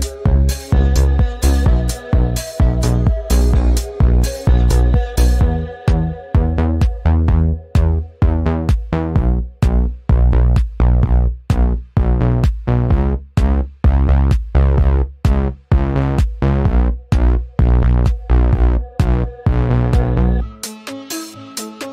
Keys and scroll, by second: 10.2 Delete, 11.2 ctrl+z, 17.9 ctrl+shift+z.